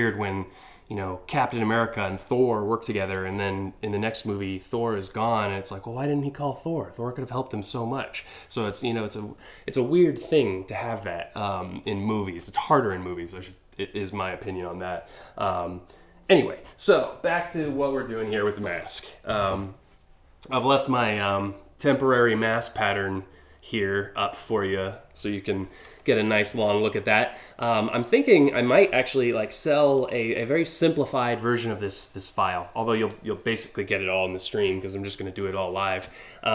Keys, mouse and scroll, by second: 27.3 scroll down 1, 29.6 click, 30.0 scroll down 1, 30.5-31.3 scroll up 4.